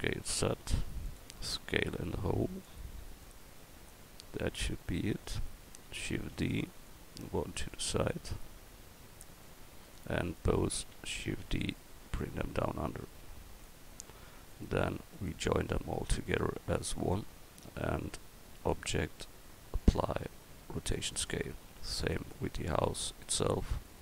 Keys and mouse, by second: 1.5 s, 3.2-4.7 drag, 6.2 shift+d, 6.9-9.2 drag, 11.3 shift+d.